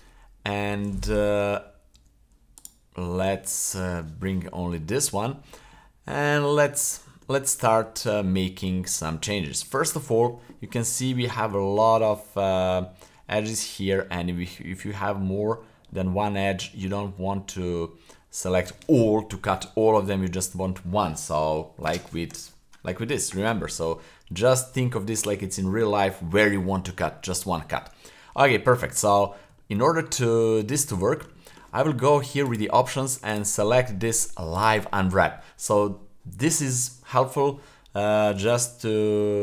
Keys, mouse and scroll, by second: 0.2 scroll down 1, 1.9 /, 2.6 right click, 3.9 Tab, 3.9 /, 4.4 scroll up 1, 4.8 shift+middle click, 5.2 scroll down 2, 5.7 shift+middle click, 6.9 shift+middle click, 7.8 Tab, 8.9 scroll up 1, 9.4-9.8 shift+middle drag, 10.6-11.0 middle drag, 11.2 scroll up 1, 11.6-12.0 shift+middle drag, 13.9 middle click, 14.4-14.7 scroll up 2, 15.1-15.6 middle drag, 15.9 middle click, 16.5 middle drag, 27.9-28.3 scroll down 1, 28.4 shift+middle click, 29.0 middle click, 29.5 shift+scroll up 2, 29.8 middle click, 30.3-30.9 scroll down 2, 31.0 middle click, 31.4 shift+middle click, 32.4-37.0 drag.